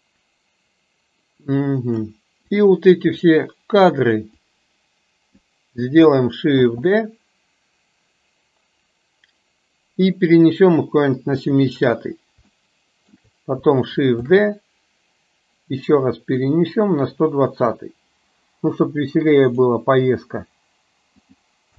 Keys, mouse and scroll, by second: 2.6 click, 3.7 click, 4.4-5.4 drag, 6.7 shift+d, 12.6 shift+middle click, 14.3 shift+d, 19.6 click, 21.3 click.